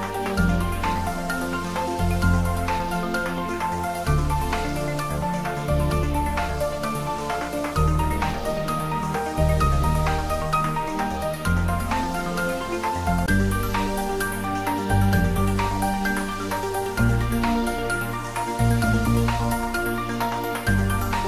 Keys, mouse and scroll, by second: 1.8-2.3 scroll down 1, 4.4 click, 7.8 click, 7.8 click, 17.7 click, 21.0-21.2 scroll down 1.